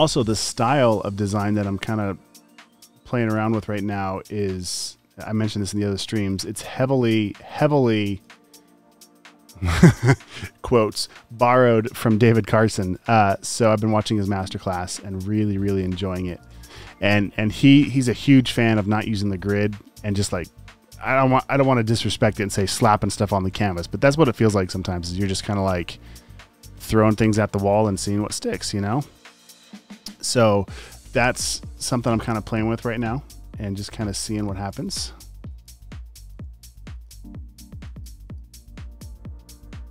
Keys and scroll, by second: 0.0-0.1 typing, 1.3 v, 3.2 typing, 5.4 super+z, 5.7 v, 13.4 space, 13.7 v, 15.7 space, 16.3 space, 16.5 v, 18.2 space, 32.7 space, 34.7 space, 35.4 space, 35.9 super+space, 36.5 v.